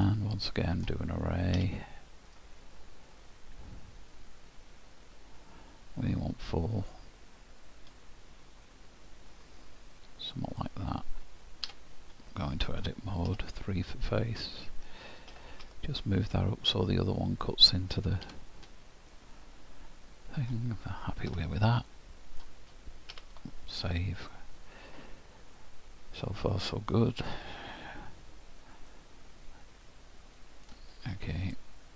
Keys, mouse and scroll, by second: 0.1 middle click, 1.6 q, 11.7 Tab, 12.3 middle click, 13.3 3, 14.3 click, 15.3 g, 18.3 Tab, 19.1 middle click, 21.3 h, 21.9 middle click, 23.1 ctrl+w, 24.3 middle click, 27.6 scroll down 1, 28.9 middle click, 31.4 click.